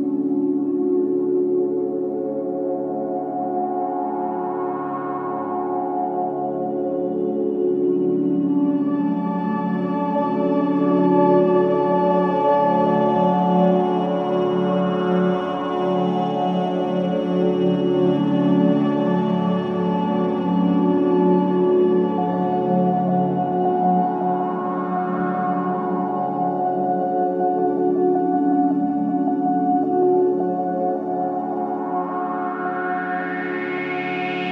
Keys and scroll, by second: 12.8 ctrl+z, 13.7 ctrl+z, 17.1 ], 18.3 ], 21.0 4, 22.3 1, 29.7 ctrl+z, 31.3 4.